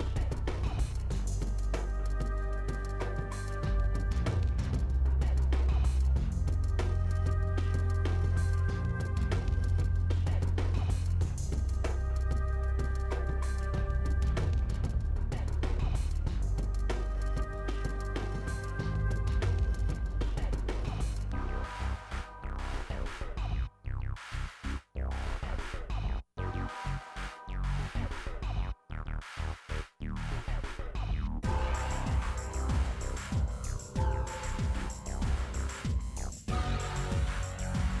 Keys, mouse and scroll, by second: 0.0 shift+a, 0.3 g, 0.8 middle click, 1.6 s, 3.2-4.9 drag, 4.9 Tab, 5.1 middle click, 5.3 KP_1, 5.6 scroll up 4, 5.7 shift+middle click, 6.8 shift+middle click, 7.0 click, 7.5 g, 8.7 middle click, 9.3 click, 9.5 middle click, 9.7 scroll down 1, 9.9 shift+middle click, 10.9 middle click, 11.5 KP_1, 11.7-12.5 scroll up 9, 11.8 shift+middle click, 12.0 shift+middle click, 12.5 g, 12.9 middle click, 13.1 scroll down 8, 13.3-14.7 middle drag, 14.7 click, 15.4 s, 16.8 ctrl+s, 17.0 middle click, 17.1-17.5 scroll down 2, 17.3 middle click, 17.5 middle click, 17.7 scroll up 2, 17.9-20.3 shift+middle drag, 20.3-21.7 drag, 21.9 click, 22.1 l, 22.3 middle click, 22.5 scroll down 4, 22.7 middle click, 23.0 KP_7, 23.3 click, 23.9 s, 25.1 g, 25.9-26.3 scroll up 6, 26.0 shift+middle click, 26.3 shift+middle click, 26.9 g, 27.9-28.4 scroll down 8, 29.1 shift+d, 31.2 g, 32.1-33.2 scroll up 4, 32.2 shift+middle click, 32.5 shift+middle click, 33.2 g, 34.5 g, 37.0 shift+middle click, 37.4-38.0 scroll down 7.